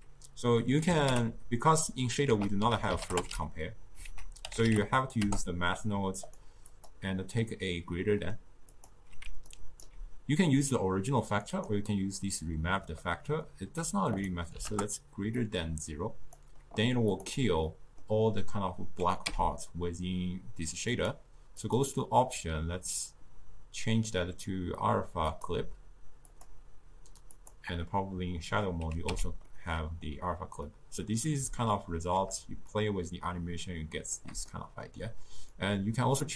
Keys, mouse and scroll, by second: 6.7-9.3 drag, 9.5-11.5 alt+right drag, 11.5 click, 12.9-14.1 middle drag, 14.1-15.5 drag, 17.2 click, 17.7-19.3 middle drag, 19.3 n, 21.0 click, 21.7-24.8 drag, 26.3-29.1 drag, 29.1 n, 29.5-32.8 middle drag, 32.8-34.5 shift+drag, 34.5 middle click, 35.5-36.3 shift+drag.